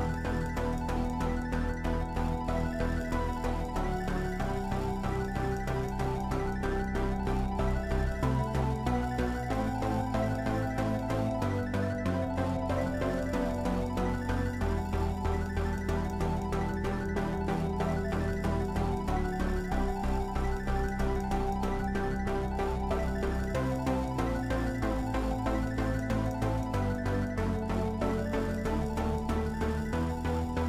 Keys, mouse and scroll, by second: 0.0-2.4 middle drag, 2.4 i, 2.9 i, 3.8-6.2 middle drag, 6.2-8.6 drag, 8.6-10.0 middle drag, 10.0-14.0 drag, 14.0-26.5 middle drag, 26.5 i, 27.2 i, 28.4-30.6 drag.